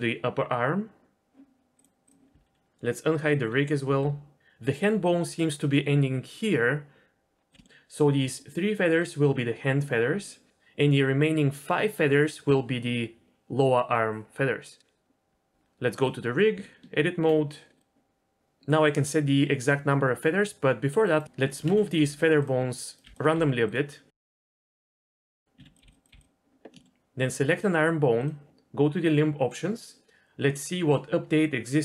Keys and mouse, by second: 1.8 click, 3.8 alt+h, 4.9-5.6 d, 7.4 click, 7.5 d, 7.8-9.9 middle drag, 15.3 Tab, 16.5 Tab, 17.7 click, 21.0 click, 21.3 g, 22.1 g, 22.8 click, 22.9 ctrl+z, 22.9 g, 23.5 ctrl+z, 23.7 g, 24.6 click, 24.9 g, 25.1 click, 25.3 g, 25.6 ctrl+z, 25.8 g, 26.1 g, 26.8 shift+middle click, 29.5-31.8 drag.